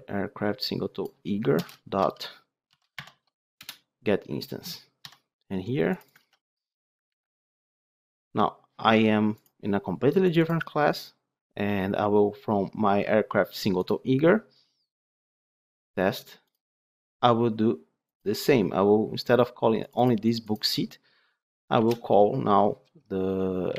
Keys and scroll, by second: 3.6 Return, 6.1 ctrl+c, 7.0 ctrl+v.